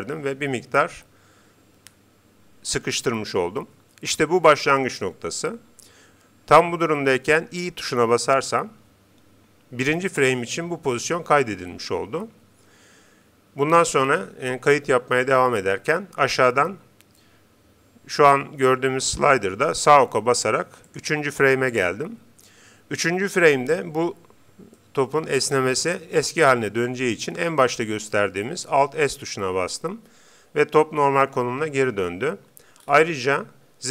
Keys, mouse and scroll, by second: 20.3-22.5 drag, 24.8-26.4 middle drag, 28.9 alt+s, 32.8-33.9 middle drag.